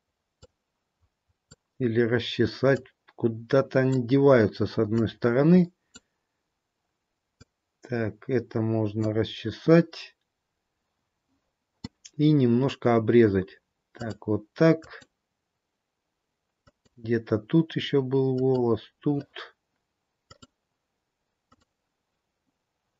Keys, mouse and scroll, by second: 0.6 click, 2.9 click, 7.5 click, 13.9 click, 14.9 click, 18.5 click, 20.2 click.